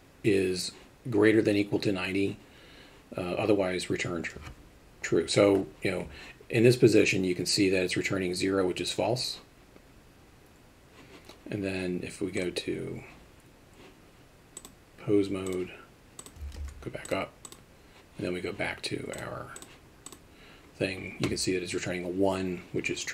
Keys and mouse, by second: 14.7-15.5 drag, 16.2 click, 16.6 alt+r, 17.1 click, 19.2 click, 20.1 click.